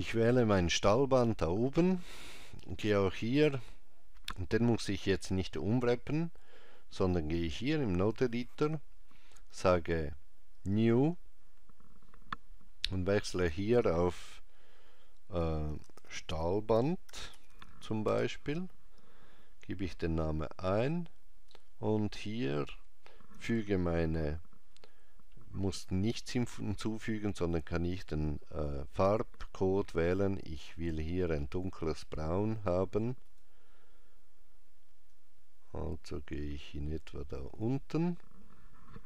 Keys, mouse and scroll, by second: 0.7 click, 7.0 click, 10.6 click, 13.1 click, 21.6 middle click, 27.4 click, 33.3 click.